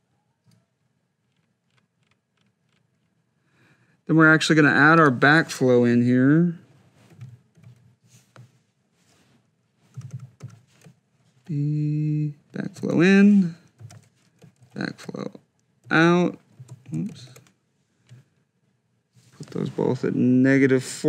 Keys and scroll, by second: 6.9 F2, 9.8 Delete, 11.6 shift+b, 13.1 shift+i, 13.6 Down, 14.4 shift+e, 16.0 o, 17.1 shift+c, 20.4 -.